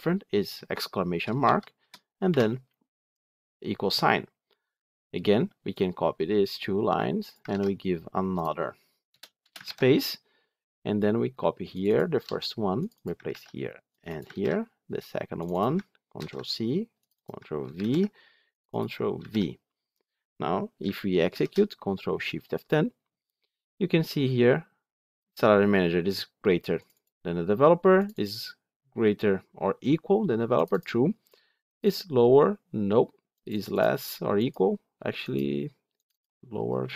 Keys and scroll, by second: 7.4 ctrl+c, 9.5 ctrl+v, 12.1 ctrl+c, 13.1 ctrl+v, 16.0 ctrl+c, 17.6 ctrl+v.